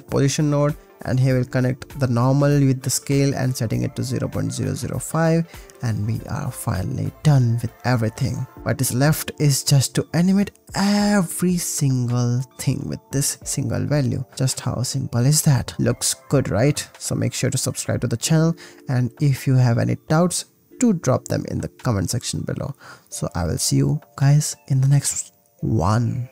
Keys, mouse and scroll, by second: 0.4 drag, 1.0-3.4 drag, 3.8 click, 4.9 ctrl+s, 6.0 ctrl+s, 7.5 ctrl+s, 8.6-10.9 shift+drag, 10.9 shift+middle click, 13.7 click, 14.3 middle click, 14.5 click, 14.7 click, 14.8 middle click, 15.9 ctrl+s, 17.2 ctrl+s, 18.3 middle click, 19.5 ctrl+s, 20.3 ctrl+s, 21.0 ctrl+s, 25.1 click, 25.6 click, 25.9 ctrl+s.